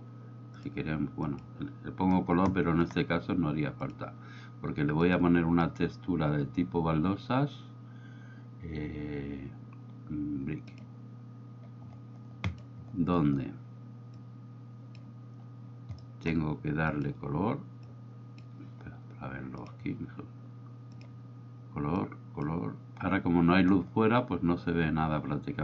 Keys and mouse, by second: 0.7 click, 4.0-12.7 drag, 14.2-15.1 drag, 16.2 middle click, 16.9 click, 19.7 drag, 21.0 click.